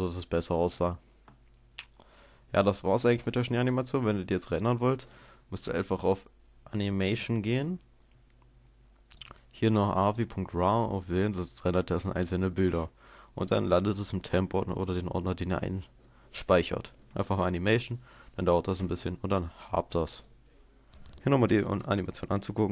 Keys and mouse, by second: 0.0 Escape, 0.2 click, 0.9 click, 3.8-5.6 drag, 9.3-21.7 drag, 21.7 KP_0.